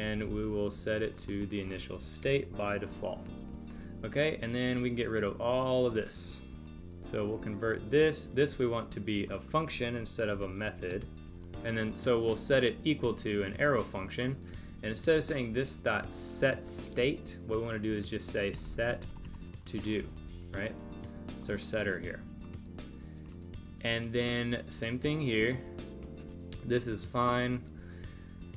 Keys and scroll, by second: 2.2 super+Right, 10.9 space, 20.2 super+Right.